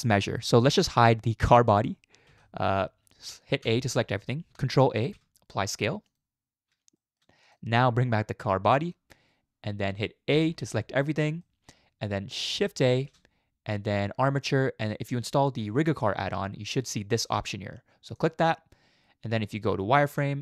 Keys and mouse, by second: 2.3 h, 3.6 a, 4.9 ctrl+a, 7.0 shift+middle click, 7.5 click, 8.7 click, 10.3 a, 11.4 middle click, 12.9 shift+a, 19.5 z.